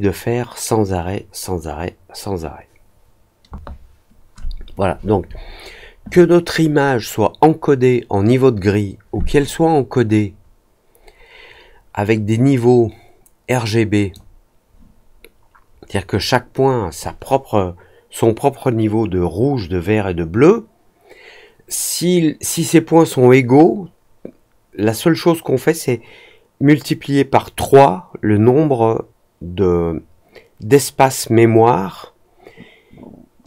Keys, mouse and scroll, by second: 9.4-14.1 drag.